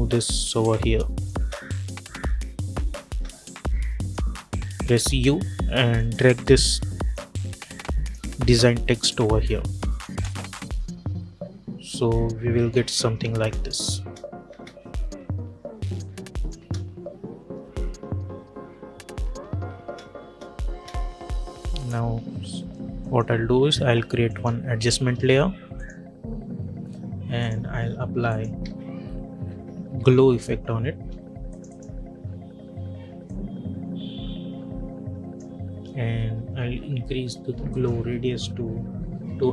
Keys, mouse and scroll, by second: 1.2 space, 3.9 click, 4.8 u, 5.8-10.0 drag, 10.0 space, 13.2 space, 15.9 click, 16.5 space, 19.6 space, 21.6 click, 22.9 right click, 24.2 click, 28.5 ctrl+a, 29.1-30.5 typing, 31.4-37.6 drag.